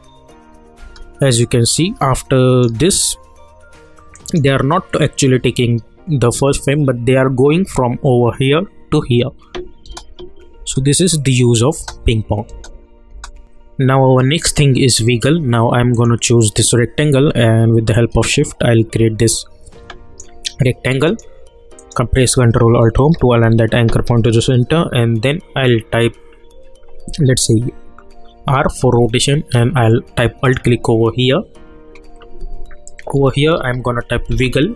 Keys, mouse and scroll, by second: 0.8 space, 1.4-2.9 drag, 2.9 -, 4.1 click, 9.8 space, 13.4 click, 15.9-21.0 drag, 22.9 ctrl+alt+Home, 28.4 r, 30.4 alt+click, 32.9-34.0 typing, 34.3 Return.